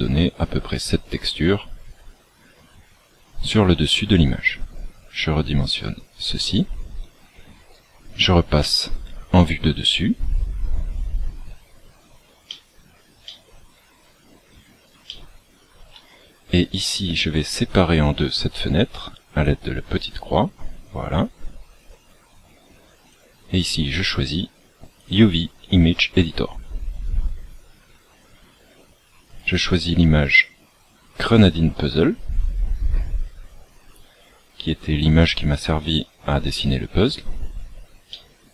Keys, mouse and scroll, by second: 4.6 click, 8.6 KP_7, 10.8-11.9 scroll up 3, 11.9-12.4 scroll up 3, 12.4 shift+middle click, 13.2 shift+middle click, 14.0 scroll up 1, 15.0 shift+middle click, 19.9 click.